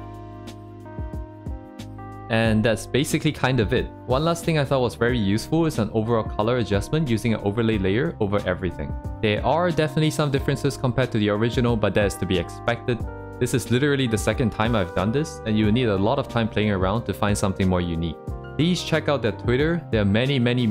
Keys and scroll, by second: 0.8 ctrl+z, 1.5 ctrl+z, 2.0 ctrl+z, 4.6 ctrl+z, 5.5 ctrl+z, 8.5 ctrl+z, 10.2 ctrl+z, 11.3 ctrl+z, 18.3 ctrl+z.